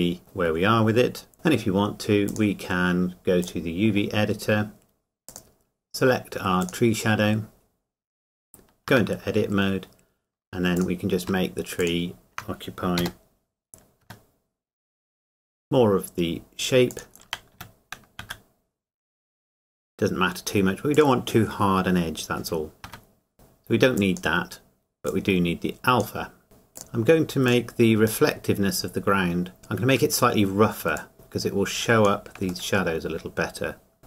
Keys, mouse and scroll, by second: 0.5-0.9 scroll down 1, 2.3 click, 7.6-8.4 scroll up 1, 9.4 Tab, 11.2 click, 13.0 g, 15.4 x, 16.9 click, 18.2 s, 20.9 click, 23.3-24.0 scroll down 1, 24.0 click, 26.8 middle click, 27.5 click, 28.2 middle click, 31.0 click, 32.7 middle click.